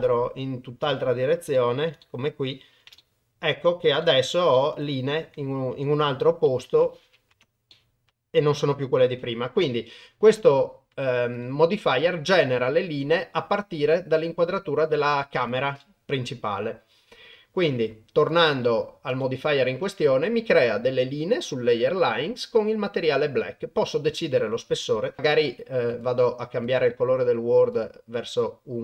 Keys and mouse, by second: 1.0-1.3 shift+middle drag, 1.6 ctrl+middle drag, 2.0-2.7 shift+middle drag, 3.1-3.9 ctrl+middle drag, 4.1 shift+middle click, 4.7 middle click, 5.9 Tab, 6.5 Tab, 7.3 KP_0, 7.8-9.0 middle drag, 15.5 click, 15.8-16.3 middle drag, 18.2 click, 19.2 click, 24.7 KP_0.